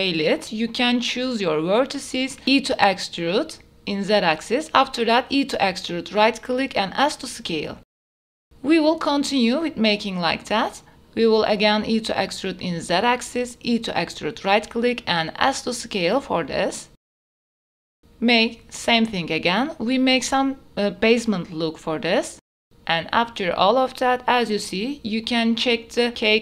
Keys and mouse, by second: 0.2 click, 0.6 s, 2.7 click, 4.1 shift+middle click, 4.4 e, 5.1 z, 7.8 e, 8.1 s, 10.0 click, 10.7 e, 11.0 z, 12.8 click, 13.6 e, 16.8-19.0 typing, 17.0 click, 18.5 click, 20.6 e, 20.9 s, 22.1 click, 22.5 e, 22.7 click, 22.7 z, 23.0 e, 23.4 s, 24.8 click, 25.4 Tab, 25.4 f, 26.0 middle click.